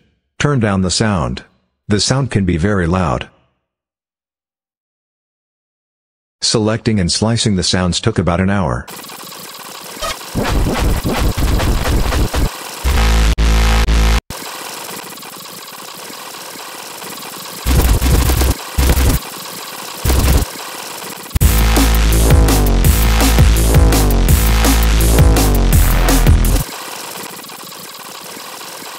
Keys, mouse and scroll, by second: 1.4 click, 2.9 click, 3.8 click, 5.6 click, 6.5 click, 7.2 click, 8.1 click, 9.4 click, 9.4-13.1 typing, 9.6 click, 10.1-10.6 scroll up 4, 10.3 click, 11.3 click, 11.5 click, 11.6 scroll up 2, 12.3 click, 12.5 scroll down 2, 14.5 s, 14.5 click, 14.6 s, 14.7 scroll down 2, 14.9 click, 15.3 click, 15.5 right click, 15.7 click, 16.0 click, 16.0 scroll up 1, 16.2 click, 16.4 click, 16.7 click, 17.1 click, 17.4 click, 17.6-21.3 typing, 17.6-18.1 scroll up 2, 18.5 scroll up 2, 19.2 click, 19.4 scroll down 2, 19.5 Delete, 19.7 ctrl+click, 20.6 ctrl+middle click, 20.8 middle click, 20.9 ctrl+middle click, 21.1 middle click, 21.3 middle click, 26.6 space, 27.0 click, 27.6 click, 27.7 scroll up 1, 28.1 click, 28.2 click, 28.8 Delete.